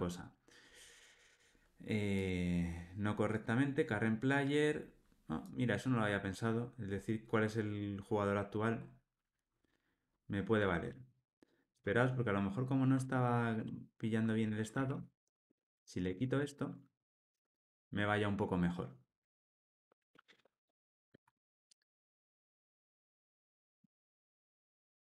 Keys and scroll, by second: 17.0 alt+super+l.